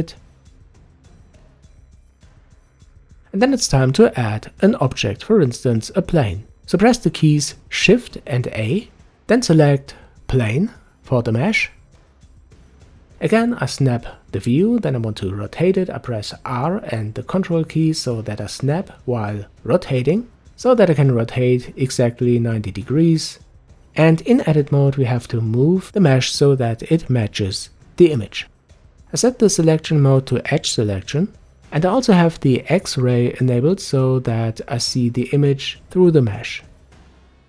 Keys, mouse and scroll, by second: 7.8 shift+a, 11.5-12.7 middle drag, 12.7-13.3 scroll up 1, 13.3-13.7 scroll up 1, 13.7 Tab, 15.6-17.3 middle drag, 17.3 r, 21.7-23.8 middle drag, 23.8 g, 28.7 click.